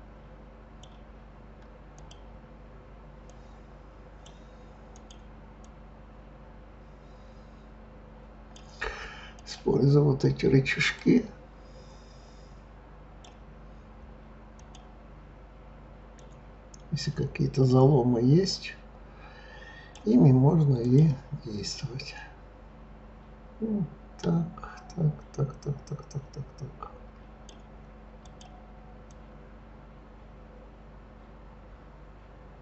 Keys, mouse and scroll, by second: 1.9 click, 3.2 click, 4.9 click, 5.6 click, 9.4 click, 11.0 click, 14.6 click, 16.1 click, 20.8 click, 21.7 click, 28.2 click, 29.1 click.